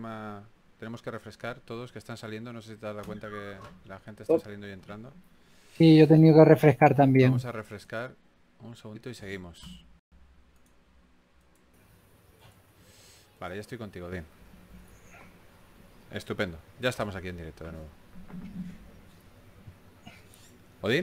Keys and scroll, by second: 4.3 s.